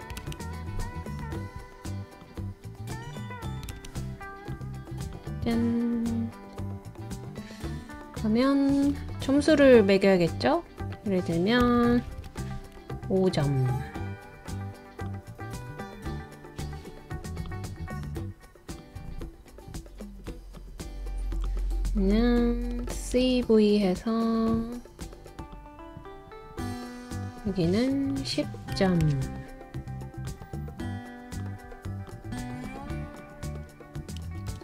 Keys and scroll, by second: 0.0-0.6 typing, 3.2-4.1 typing, 11.6-12.5 typing, 22.8 super+c, 23.1 super+v, 28.6-29.5 typing, 34.2 super+c, 34.5 super+v.